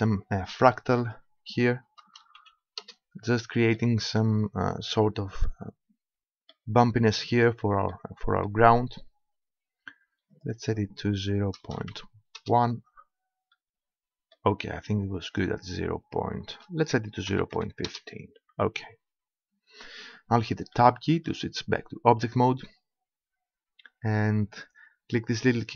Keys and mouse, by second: 1.0-2.8 drag, 2.8-3.8 middle drag, 6.7-7.9 middle drag, 9.0-10.3 middle drag, 10.3-12.3 drag, 13.6-15.3 middle drag, 15.3-18.9 drag, 18.9-20.4 middle drag, 20.4 Tab, 20.8-22.6 middle drag, 22.6-23.6 drag, 23.6-24.7 middle drag.